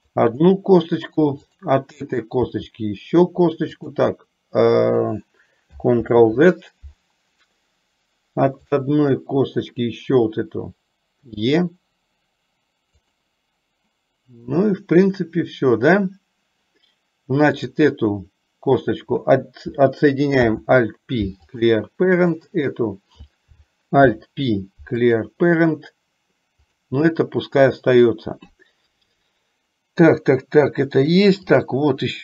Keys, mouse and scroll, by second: 2.6 e, 6.1 ctrl+z, 8.7 click, 11.4 e, 20.5 alt+p, 22.5 click, 24.1 alt+p, 26.6 click.